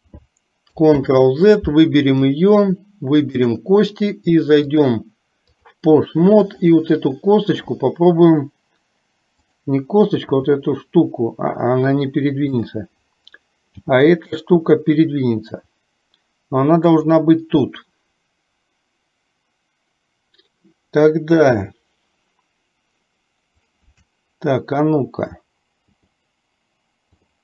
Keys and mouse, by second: 1.0 ctrl+z, 3.2 shift+click, 4.7-5.7 drag, 9.5 click, 10.4 g, 12.6 click, 13.9 g, 21.4 KP_3, 26.0 t, 27.1 t.